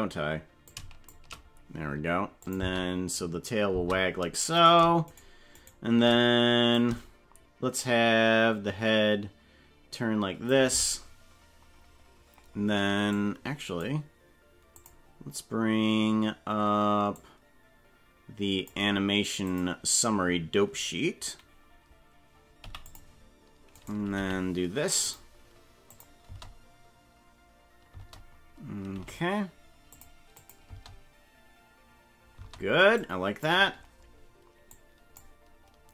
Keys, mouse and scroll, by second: 0.7 shift+click, 1.1 shift+middle click, 2.5 click, 2.7 space, 3.7 space, 4.8 right click, 5.2 shift+right click, 5.8 right click, 6.7-10.6 shift+drag, 13.2 click, 14.8 click, 17.2-18.7 drag, 19.6 click, 23.7 right click, 24.2 g, 25.9 click, 26.3 space, 28.0 space, 29.0 g, 30.4 click, 30.7 space, 32.4 space, 33.0 click, 34.8 click.